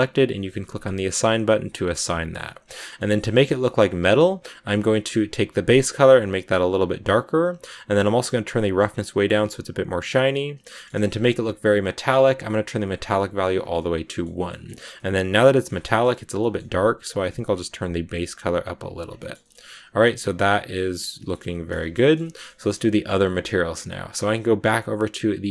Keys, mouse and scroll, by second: 1.7 Tab, 1.8-4.1 middle drag, 4.1 z, 6.3 click, 8.4 scroll down 3, 8.8-10.6 drag, 10.6 shift+middle click, 10.9-12.9 scroll up 1, 12.9 click, 13.4 scroll down 2, 13.7 middle click, 14.3-14.8 scroll up 3, 14.4 middle click, 14.8-18.2 middle drag, 18.2 click, 18.9 scroll up 1, 18.9 scroll down 2, 19.1 shift+middle click, 19.5 scroll down 1, 19.6-21.7 middle drag, 21.7 a, 21.9-23.1 shift+middle drag, 23.1-25.5 scroll up 1.